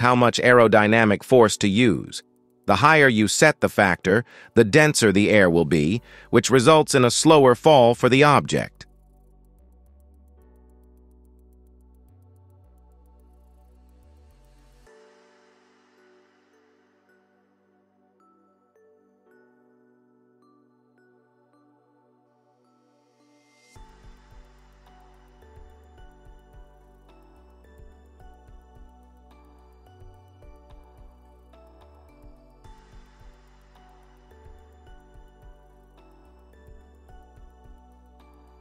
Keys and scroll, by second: 2.7 KP_0, 12.4 KP_0, 20.5 KP_0, 28.2 KP_0.